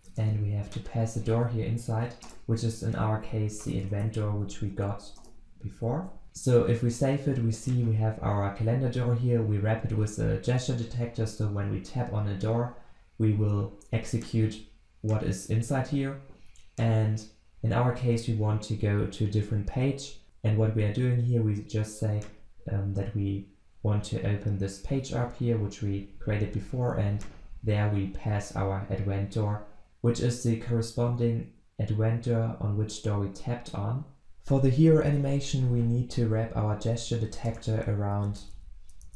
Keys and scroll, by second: 0.0 ctrl+space, 2.2 Return, 6.1 ctrl+s, 37.5 alt+Return.